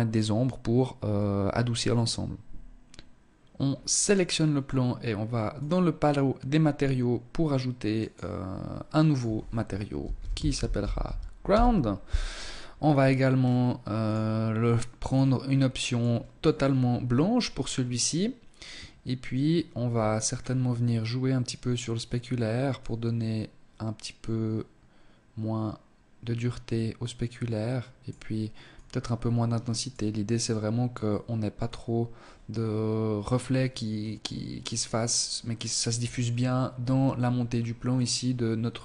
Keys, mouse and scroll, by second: 3.0 right click, 4.6 click, 6.9 click, 8.1 click, 11.8-12.9 scroll down 4, 12.9 scroll down 1, 13.1 click, 14.1 click, 16.5-17.2 scroll down 3, 18.9-20.1 scroll up 5, 20.1 scroll up 1, 21.8 click, 27.7 click, 29.5 click.